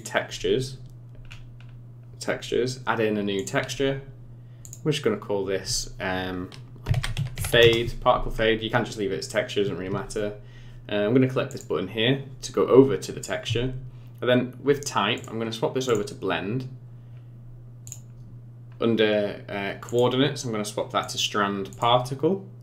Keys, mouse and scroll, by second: 0.4-1.2 scroll down 4, 1.2-1.7 scroll up 7, 2.1-2.9 scroll down 2, 3.4 click, 4.6 click, 11.5 click, 15.2 click, 17.1-17.8 scroll down 4, 17.8 click, 18.1-18.6 scroll down 2, 18.7 scroll up 2, 19.9 click, 21.7 click, 22.1-22.6 scroll down 3.